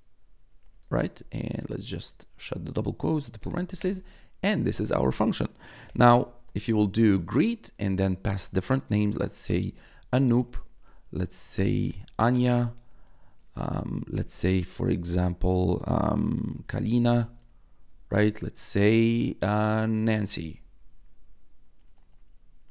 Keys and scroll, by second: 0.0-0.6 typing, 1.6 shift+', 2.2 shift+0, 3.4 Return, 5.8 g, 7.2-13.9 typing, 14.9 shift+', 16.2-17.8 typing, 19.7-21.7 typing.